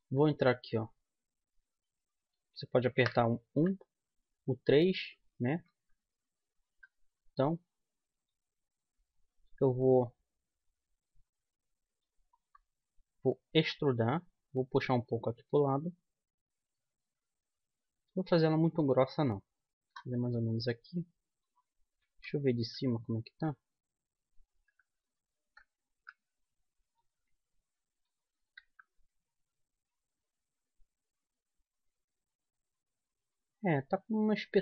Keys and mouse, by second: 3.7 KP_3, 5.2 KP_1, 5.9 KP_3, 9.5-11.3 middle drag, 11.9-13.7 middle drag, 13.7 e, 14.9-16.7 drag, 20.5-22.2 middle drag, 22.2 KP_7, 26.1 KP_1, 28.8 z.